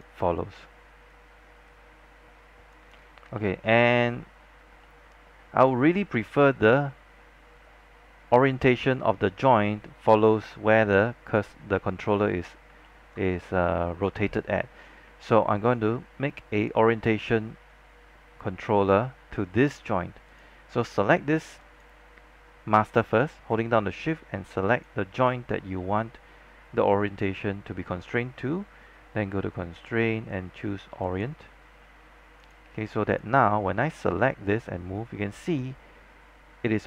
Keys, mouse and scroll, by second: 0.3 alt+middle click, 1.2-2.8 drag, 2.8 z, 3.8 alt+middle click, 4.2 z, 4.5 scroll down 1, 4.9 alt+middle click, 5.3 scroll up 1, 6.4-11.5 drag, 11.5 z, 12.5 scroll up 1, 13.3 alt+middle click, 16.6-22.9 drag, 24.8 shift+click, 29.8 click, 33.6-34.4 scroll down 1, 34.4-36.8 drag.